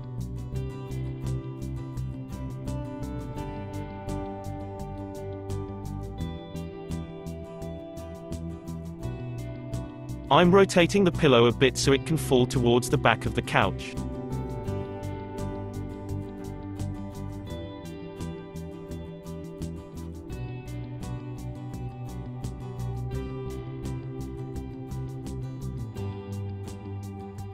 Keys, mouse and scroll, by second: 0.3 space, 3.6 space, 4.0-6.3 middle drag, 6.3-9.4 drag, 9.6 r, 14.3-17.4 middle drag, 18.0 space, 19.8 space, 21.0 click, 21.9 Left, 22.5 Right, 22.7 Right, 26.1-26.9 drag, 26.9 space.